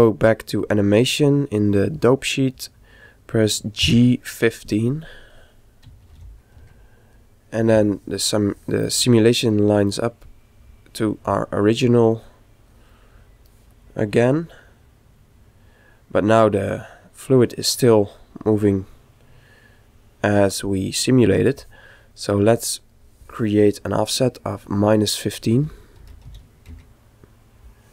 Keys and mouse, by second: 3.9 g, 12.3 click, 13.0 middle click, 13.7-15.9 drag, 22.4-24.5 right drag, 24.2 click.